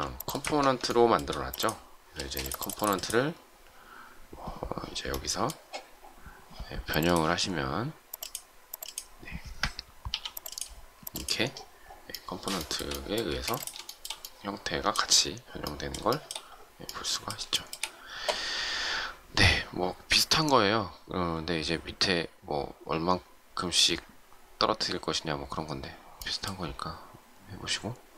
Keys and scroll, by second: 2.1 space, 13.3 shift+space.